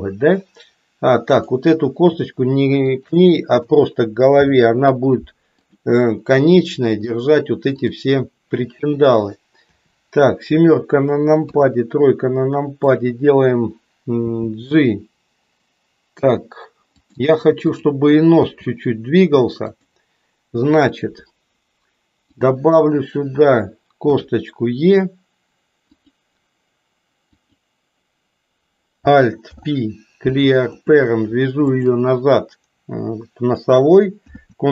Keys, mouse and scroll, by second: 1.2 click, 2.9 shift+click, 4.3 ctrl+p, 6.4 middle click, 7.7 click, 9.7 KP_7, 14.3 g, 17.7 click, 18.5 g, 24.0 e, 27.3 click, 29.4 alt+p, 31.7 shift+click, 34.3 ctrl+p.